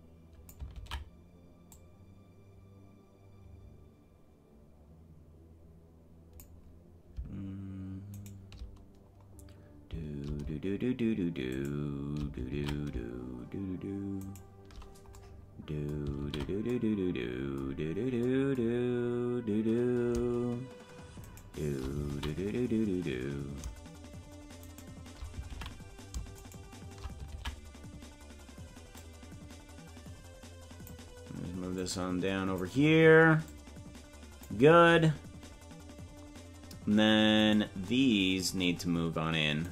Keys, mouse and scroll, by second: 0.8 ctrl+z, 1.7-6.6 drag, 9.3 scroll up 1, 11.6 shift+right click, 12.5 ctrl+z, 14.2 shift+right click, 16.2 ctrl+z, 18.0 scroll down 2, 18.9-19.3 scroll up 2, 21.3 shift+right click, 22.1 ctrl+z, 22.8 scroll down 1, 24.7 shift+right click, 25.5 ctrl+z, 26.5 shift+right click, 27.3 ctrl+z, 28.9-31.0 drag, 31.7 click, 33.4-34.5 drag, 37.5 right click.